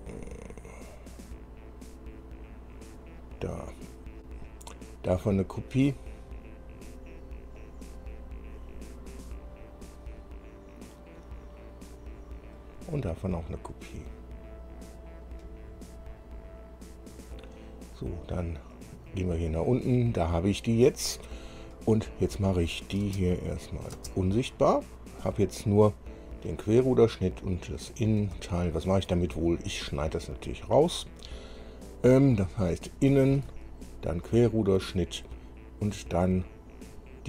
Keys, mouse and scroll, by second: 4.7 click, 7.8 click, 12.8 click, 13.9 click, 19.0-20.0 drag, 22.9 click, 23.3 space, 23.8 click, 24.2 space, 26.8 click, 27.4 click, 28.8 shift+click, 34.5 ctrl+click.